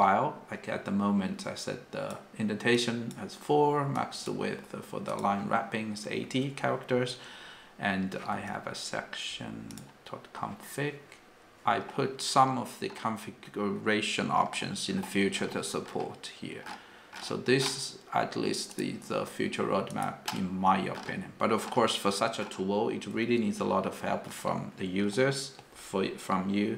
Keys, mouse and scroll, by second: 1.6 click, 1.7 click, 2.7 click, 2.9-4.1 click, 3.9 click, 4.0 click, 4.0 click.